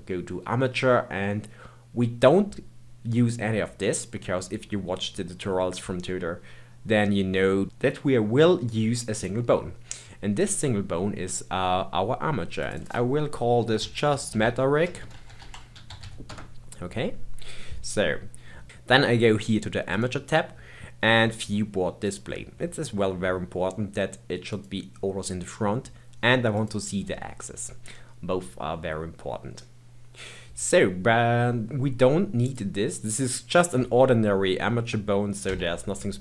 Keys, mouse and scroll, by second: 12.6 click, 12.8-14.3 drag, 14.3 BackSpace, 19.9 click, 22.0-22.6 drag, 22.6-23.3 scroll down 2, 23.3-24.5 scroll down 3, 24.5 click, 26.5 click, 32.5 click, 33.0 click, 35.5 Tab.